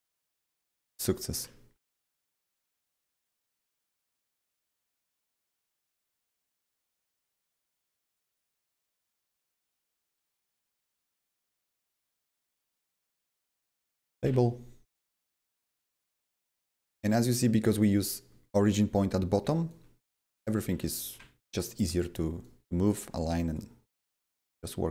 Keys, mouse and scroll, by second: 0.1 click, 0.1 typing, 2.7-6.2 drag, 4.2 w, 6.2-7.8 shift+drag, 7.8-10.1 shift+drag, 8.9 right click, 9.2 right click, 10.1-13.2 shift+drag, 12.7 Right, 13.1-14.7 typing, 15.6 right click, 16.2 click, 17.2 double click, 17.2 typing, 17.2 right click, 19.8 click, 20.0-21.7 typing, 20.7-22.4 drag, 22.4 click, 23.5-24.9 shift+drag.